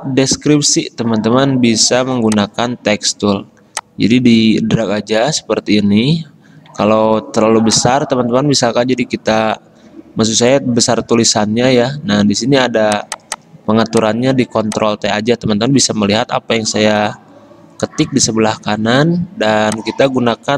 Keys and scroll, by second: 7.0 ctrl+z, 11.1 ctrl+t.